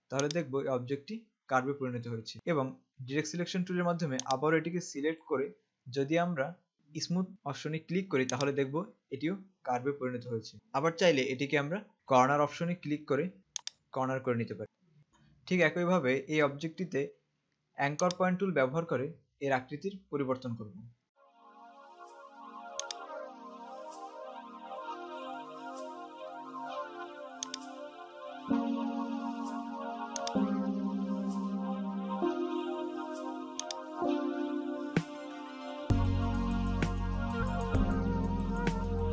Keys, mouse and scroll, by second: 0.5 click, 4.4 click, 8.6 click, 13.8 click, 18.3 click, 23.0 click.